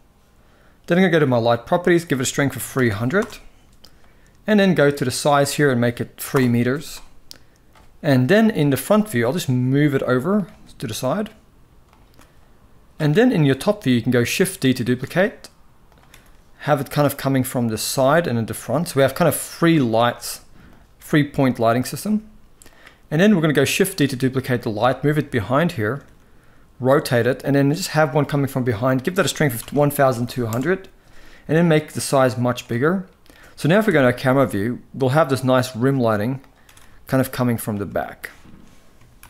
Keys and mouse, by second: 1.6-2.9 drag, 2.5 0, 4.9-6.0 drag, 8.2 KP_1, 9.1 g, 10.3 r, 13.1 KP_7, 14.5 shift+d, 15.8 r, 17.7 g, 18.7 r, 19.5 click, 19.8 g, 20.7 r, 21.7 g, 23.6 shift+d, 24.5 shift+middle click, 25.7 r, 26.9 g, 28.7-30.1 drag, 29.9 0, 31.5 click, 33.5 KP_0, 35.4 g, 36.3 r, 37.7 shift+middle click, 38.9 ctrl+b.